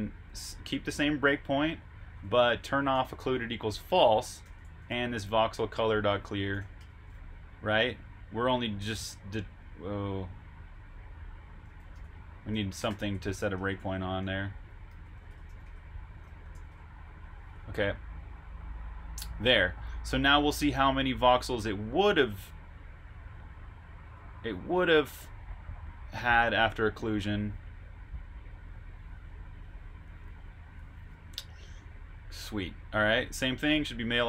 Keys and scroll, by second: 1.6-7.0 typing, 11.6-16.0 typing, 17.0-18.2 typing, 19.9 typing, 20.3 super+Tab.